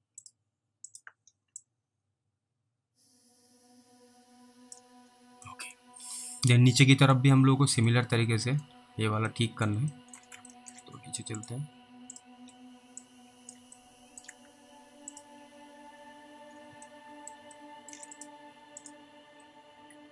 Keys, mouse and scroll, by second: 0.2 ctrl+click, 1.9 click, 5.0-5.4 scroll down 1, 5.8 middle click, 6.4 scroll down 1, 6.5 middle click, 7.2 middle click, 8.2 alt+middle click, 8.9 scroll up 1, 9.6 alt+middle click, 10.2 middle click, 10.8 ctrl+alt+middle click, 11.4 click, 12.1 ctrl+click, 13.3 click, 14.1 alt+middle click, 15.2 click, 17.2 middle click, 18.2 click, 19.8 ctrl+q.